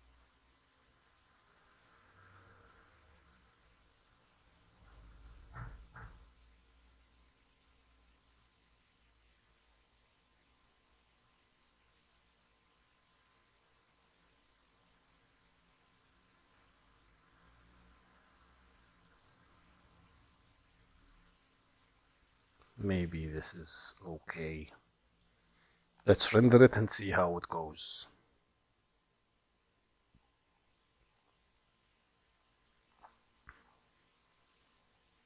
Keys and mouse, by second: 2.5-5.1 drag, 6.0-8.4 drag, 12.3-13.7 drag, 14.4 click, 16.9-24.5 drag, 33.3 click, 34.7 click.